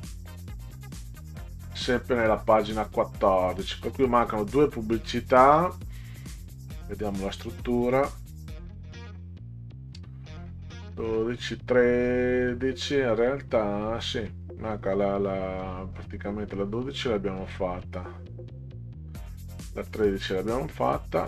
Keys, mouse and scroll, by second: 1.0 middle click, 7.0-7.5 scroll down 4, 17.6 click, 19.8 click.